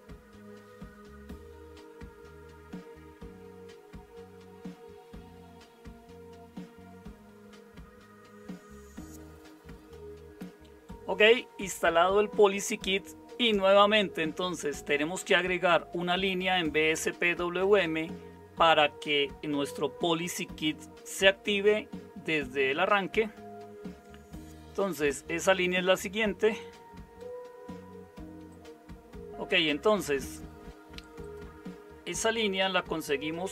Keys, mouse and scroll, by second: 29.3 typing, 33.2-33.5 typing.